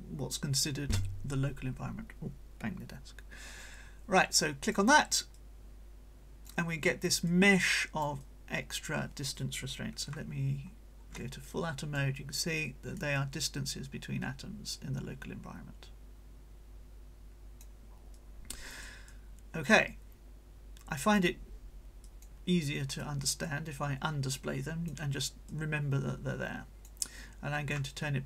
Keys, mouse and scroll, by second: 4.4 click, 5.3-6.7 drag, 7.3-8.9 drag, 8.2 right click, 10.6 ctrl+shift+scroll down 2, 11.4-17.8 ctrl+shift+drag, 12.1-17.8 right drag, 18.1 right click, 19.0-21.4 drag, 22.0 click, 23.2 click, 25.4-27.0 drag.